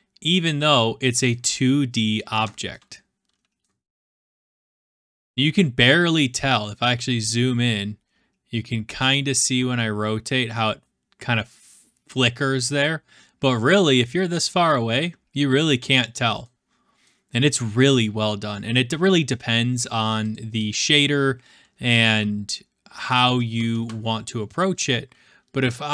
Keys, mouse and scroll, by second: 1.2-1.6 middle drag, 1.6 scroll up 1, 1.6 scroll, 2.9-3.7 shift+middle drag, 6.4 middle click, 6.7 middle click, 8.2 middle click, 10.5 middle click, 12.7 scroll up 1, 12.8 scroll, 14.5-15.3 scroll, 16.2 scroll, 17.0-18.5 middle drag, 18.5-19.3 scroll, 19.8 right click, 20.3 click, 21.6-23.7 typing.